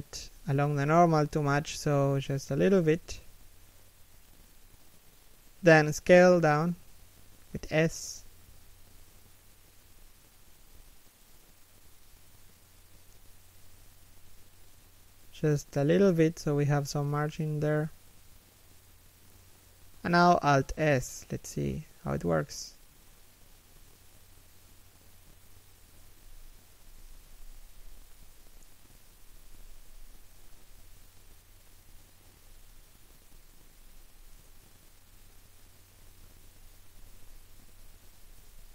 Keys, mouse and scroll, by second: 12.3 s, 15.8 g, 17.6 scroll up 1, 19.9 scroll down 1, 20.3 shift+middle click, 20.8-21.1 scroll down 1, 21.1 shift+middle click, 21.6 scroll up 1, 22.3 shift+middle click, 24.1 alt+s, 27.1 z, 27.5 scroll down 1, 28.0 z, 28.5 scroll up 1, 28.7 a, 29.1 alt+right click, 30.8 scroll down 1, 31.1 alt+s, 32.5 z, 33.1 scroll down 1, 33.4 middle click, 34.1 3, 34.5 1, 35.5 alt+s, 36.4 w.